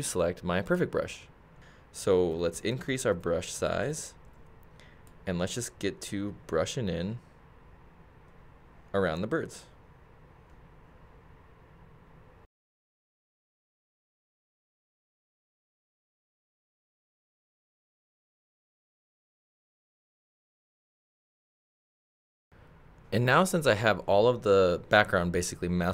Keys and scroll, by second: 2.3 ].